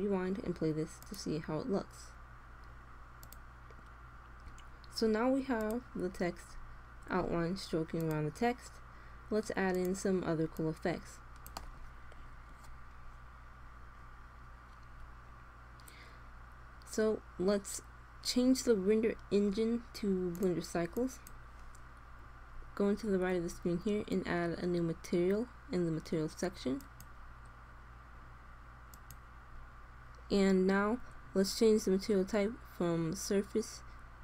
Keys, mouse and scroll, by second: 3.1-4.3 drag, 5.5 click, 6.3 click, 6.8 click, 6.9 click, 7.1 middle click, 7.3 middle click, 7.8-8.9 drag, 20.3-22.0 drag, 22.8-25.3 middle drag, 26.7-28.5 drag, 28.8 click, 30.5 click, 33.1 click.